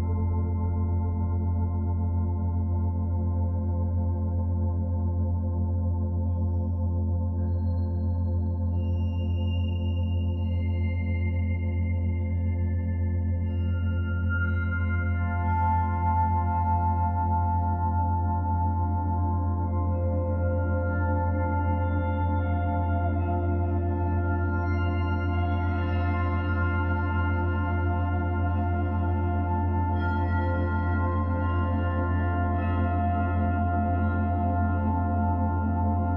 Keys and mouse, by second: 0.3-2.3 alt+drag, 2.3 1, 2.9-4.2 alt+shift+drag, 4.3 KP_Divide, 6.0 Tab, 7.8 click, 9.1 click, 10.2 alt+a, 10.6 b, 12.1-14.2 drag, 14.2 3, 15.5 alt+shift+click, 16.1 typing, 17.2 Delete, 18.9 ctrl+alt+click, 19.9 ctrl+alt+click, 20.9 ctrl+alt+click, 21.4 Tab, 22.5-24.8 drag, 25.2-26.1 drag, 26.5 /, 27.5-30.7 alt+drag, 30.8-31.8 alt+shift+drag, 32.2 1, 33.4-34.3 drag, 36.0-36.1 drag.